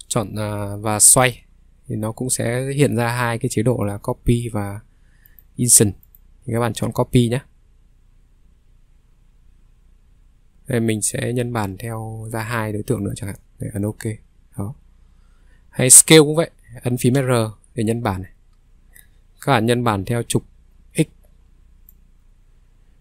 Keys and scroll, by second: 17.1 r.